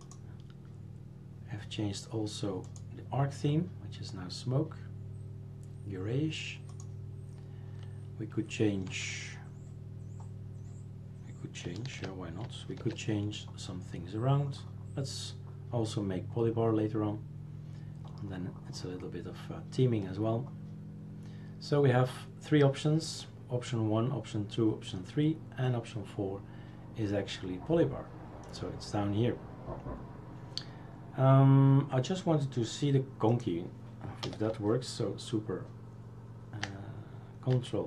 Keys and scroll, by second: 12.8 super+f, 34.2 BackSpace.